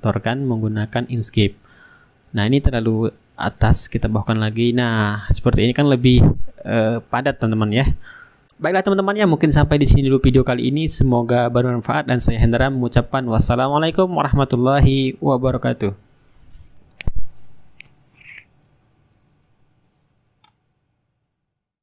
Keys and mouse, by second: 8.8-10.9 shift+right drag, 9.7-10.9 drag, 11.9-15.0 middle drag, 12.7-15.0 shift+right drag, 14.0 click, 15.4-17.1 drag, 17.3 ctrl+g, 20.6 middle click, 21.5 click.